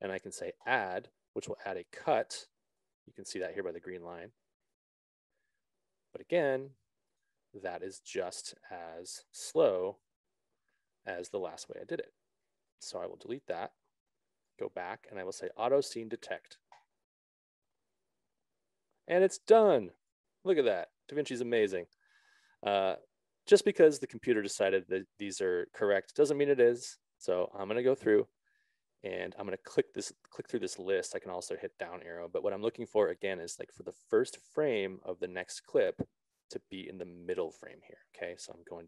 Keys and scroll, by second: 9.5 BackSpace.